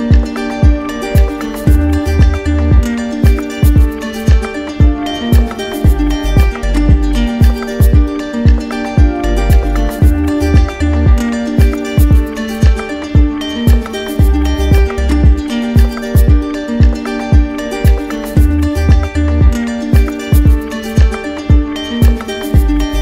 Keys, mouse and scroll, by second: 0.3 click, 1.1 right click, 1.8 shift+right click, 3.4 alt+right click, 4.0 right click, 4.6 right click, 9.3 right click, 12.0 click, 16.1 click, 17.1 click, 17.8-18.9 drag, 19.7-20.8 drag, 21.5-23.0 right drag.